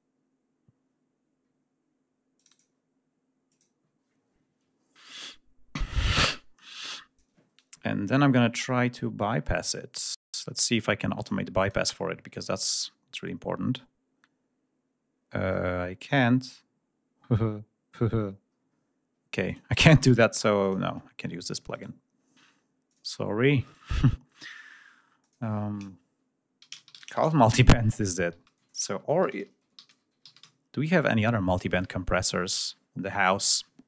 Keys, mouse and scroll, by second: 2.3 click, 3.4 click, 5.8-7.4 drag, 11.0 click, 11.5 click, 18.4-18.7 scroll down 2, 19.3 click, 20.5 click, 21.6 right click, 22.7 click, 23.5 right click, 25.1 click, 26.5-27.1 typing, 28.3 ctrl+a, 28.4 ctrl+BackSpace, 29.1-30.3 typing, 33.7-33.8 scroll down 1.